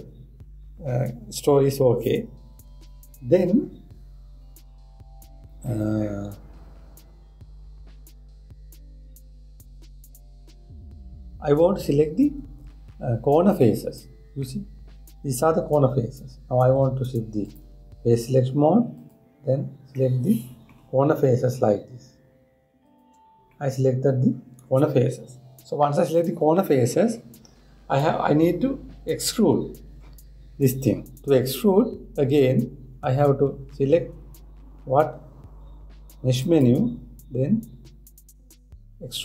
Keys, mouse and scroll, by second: 15.1-18.1 middle drag, 18.1-19.8 drag, 20.6-23.4 middle drag, 23.4 shift+click, 24.1-27.3 middle drag, 37.0-39.2 drag.